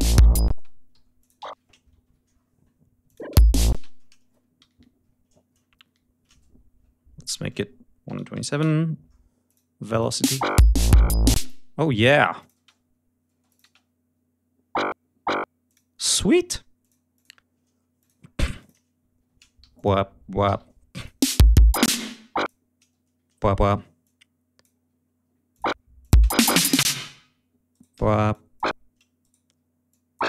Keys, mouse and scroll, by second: 0.4 space, 0.8 e, 1.1 ctrl+click, 1.3 ctrl+a, 1.9 alt+shift+Down, 3.0 click, 3.1 space, 4.5 alt+shift+Up, 5.7 alt+shift+Up, 7.3 v, 7.9 1, 8.2 7, 8.5 Return, 9.4 click, 9.8 click, 10.1 space, 11.3 click, 11.3 space, 12.3 click, 12.5 space, 13.2 space, 13.4 click, 15.6 click, 15.9 space, 16.7 click, 17.0 click, 17.9 ctrl+click, 18.2 ctrl+scroll down 2, 18.5 ctrl+click, 19.5 g, 19.6 click, 20.3 alt+d, 20.9 alt+click, 21.2 alt+space, 21.3 ctrl+alt+scroll up 2, 21.8 ctrl+space, 22.0 ctrl+d, 22.2 ctrl+click, 23.9 click, 25.4 ctrl+click, 25.9 ctrl+click, 26.0 ctrl+space, 26.7 space, 27.6 shift+right click, 28.2 shift+click, 29.1 shift+right click, 29.8 shift+click.